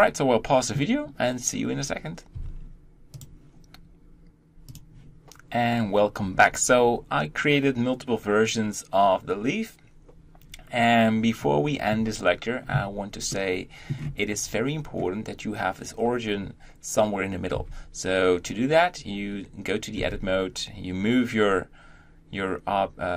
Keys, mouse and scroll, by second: 2.4 Tab, 4.5-14.6 shift+middle drag, 14.6-17.4 scroll up 1, 17.4 Tab, 19.8 g.